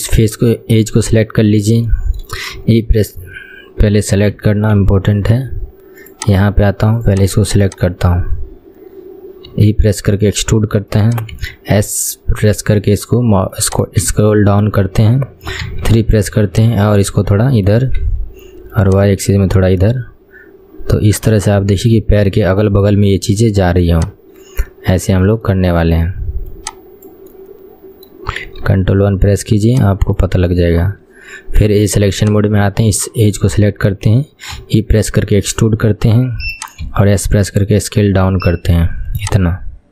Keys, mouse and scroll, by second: 0.3 click, 1.3-2.0 scroll up 5, 2.0 shift+middle click, 2.7 e, 4.5 ctrl+z, 4.9 ctrl+z, 6.2 click, 7.2 click, 7.8 click, 8.4-9.2 scroll down 5, 9.2-9.6 scroll down 1, 9.6 e, 11.5 s, 14.2 KP_1, 15.8 KP_3, 16.6 click, 18.2 KP_1, 19.0 click, 20.1-23.1 middle drag, 23.1 KP_3, 24.0 click, 25.6-26.7 middle drag, 26.7 click, 27.4-28.8 middle drag, 28.8 ctrl+KP_1, 29.8 click, 32.4 click, 33.6-34.7 scroll up 2, 34.7 e, 37.0 s.